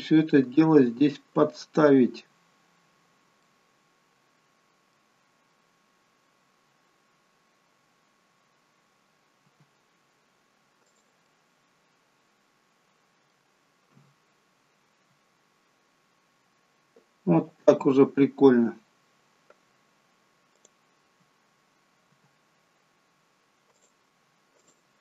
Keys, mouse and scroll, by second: 2.1-3.3 scroll up 2, 3.3 middle click, 5.4-6.3 scroll down 2, 9.4 g, 11.1 middle click, 13.9 KP_1, 15.3 scroll up 2, 17.2-18.0 scroll down 4, 20.5 click, 22.0 g, 24.5 click.